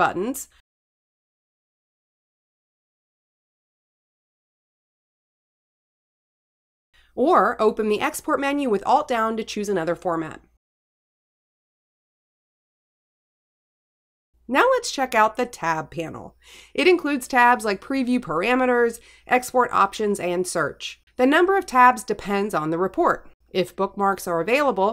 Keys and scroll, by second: 0.7 Escape, 2.2 Tab, 2.9 Return, 6.4 Tab, 8.4 Return, 10.0 alt+Down, 11.8 Return, 15.0 Right.